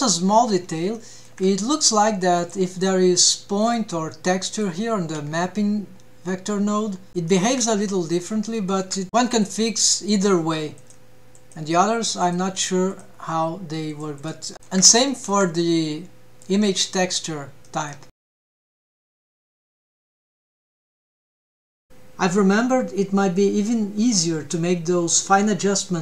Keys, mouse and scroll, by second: 0.4-0.7 scroll up 8, 0.9-1.3 shift+middle drag, 1.7 click, 3.6 click, 5.3-6.8 scroll down 2, 7.1 scroll up 3, 7.3 shift+middle drag, 8.5 shift+middle click, 9.3-10.1 drag, 10.7-11.5 drag, 12.2-13.3 drag, 13.8 click, 14.5 shift+middle drag, 14.5 scroll down 5, 15.1 shift+middle drag, 15.8 click, 16.8-17.2 shift+middle drag, 17.9 click, 18.2 click, 18.9-22.9 drag, 23.5 Tab, 23.5 click, 23.7 a, 24.2-24.5 scroll up 1, 24.5-25.5 scroll down 3, 25.5 scroll down 1.